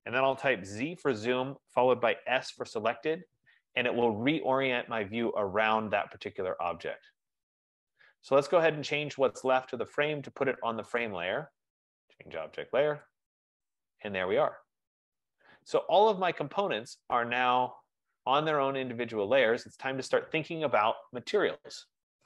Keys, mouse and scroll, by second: 0.9 z, 1.2 Return, 1.5 z, 2.4 s, 2.6 Return, 3.1 Return, 7.4 s, 8.0-10.4 right drag, 11.2 right click, 13.3 click, 14.6 click, 16.6 click, 17.1 click, 18.0 click, 19.1 click, 21.7-22.2 scroll.